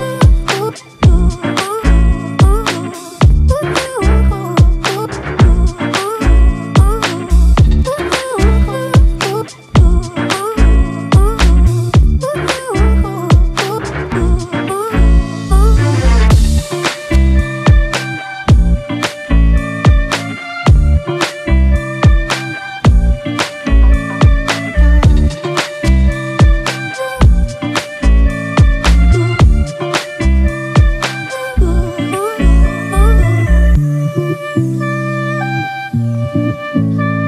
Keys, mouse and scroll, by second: 13.5 alt+click, 23.5 double click.